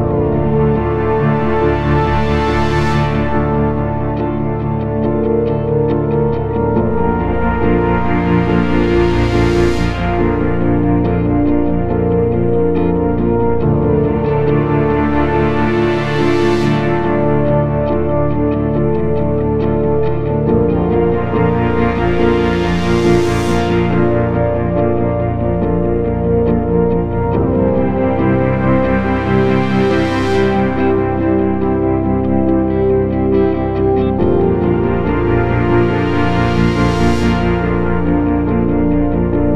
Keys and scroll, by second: 0.6 z, 2.1 ctrl+z, 18.8 shift+F2, 19.1 Escape.